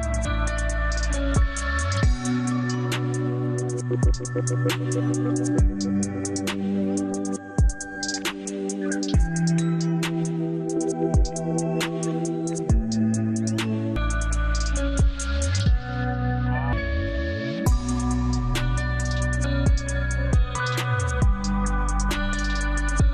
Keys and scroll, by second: 0.4 shift+F2, 2.0 shift+Page_Up, 2.5 F3, 6.2 F4, 6.8 Escape, 10.2 F3, 10.5 Escape, 12.5 Escape, 12.9 F2, 17.7 Delete.